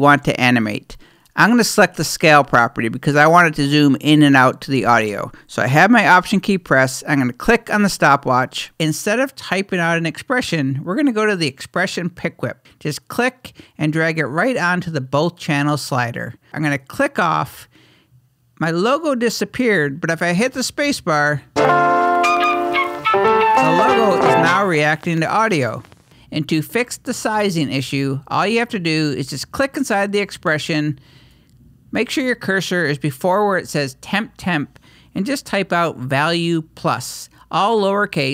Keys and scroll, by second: 27.5-28.2 typing, 31.4 typing.